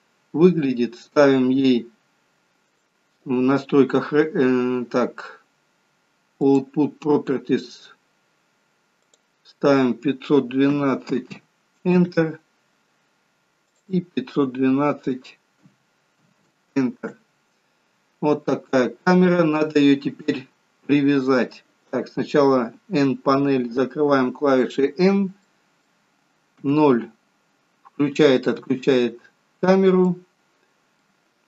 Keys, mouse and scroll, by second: 2.8 click, 6.5 click, 9.1 click, 13.8 click, 18.7-19.0 scroll down 3, 23.8 n, 25.5 middle click, 26.6 KP_0, 28.5 KP_0, 29.6-30.0 scroll down 4, 30.1 middle click.